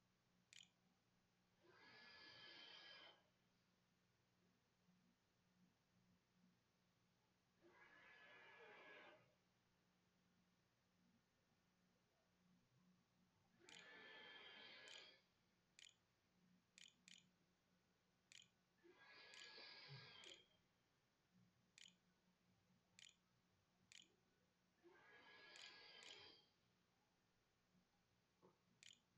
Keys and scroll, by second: 0.0-0.1 typing, 1.2 t, 2.8 r, 3.7 w, 13.2-26.1 typing, 27.6-29.1 typing.